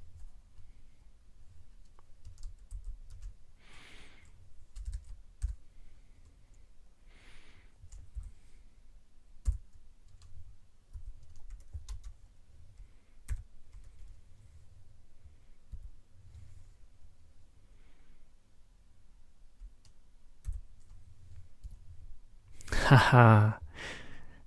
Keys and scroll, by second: 2.7 shift+super+<, 4.9 ctrl+BackSpace, 5.4 BackSpace, 8.2 ctrl+9, 9.5 ctrl+p, 11.0 ctrl+e, 11.9 Tab, 13.3 ctrl+y, 15.7 F4, 20.5 ctrl+9, 21.6 F4.